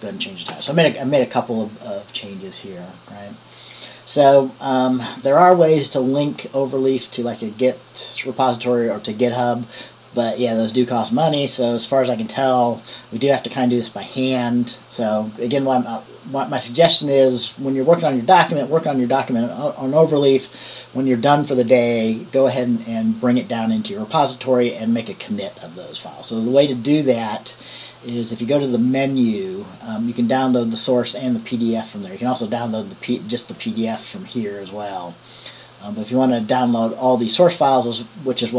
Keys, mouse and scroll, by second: 0.7 ctrl+s, 28.2 click, 35.9 click.